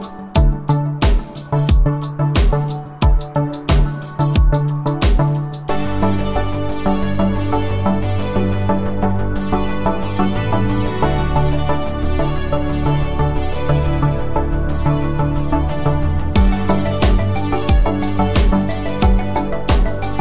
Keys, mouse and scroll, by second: 1.6-5.7 click, 14.3-15.6 scroll up 1, 15.6-18.1 click, 18.7-20.2 scroll down 1.